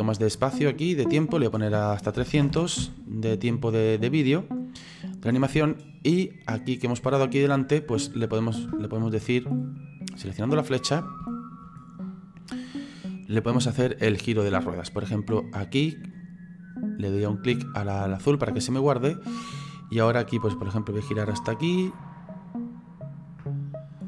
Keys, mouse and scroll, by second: 2.5 KP_0, 4.0 click, 7.9-10.2 middle drag, 10.2 right click, 10.7-12.4 middle drag, 12.4 click, 12.9 click, 18.0 click, 19.9 click.